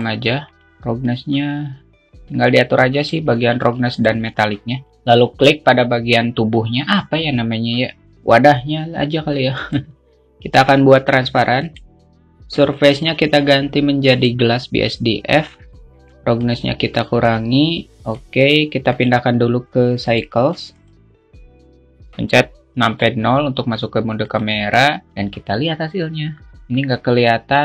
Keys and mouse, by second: 1.7-4.1 drag, 5.2-7.1 drag, 10.0-14.8 drag, 16.8-18.6 drag, 19.4 click, 20.5-21.6 drag, 23.4 KP_0, 24.8 click.